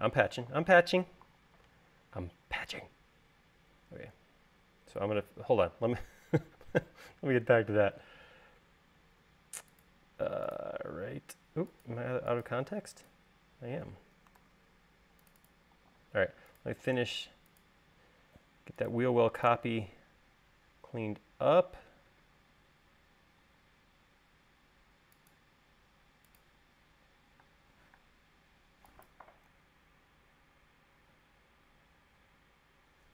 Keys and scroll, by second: 4.8 e, 7.8 l, 12.1 l, 13.7 space, 15.3 super+z, 16.7 l, 22.4 e, 24.4 l, 28.4-28.8 typing, 30.4 Right.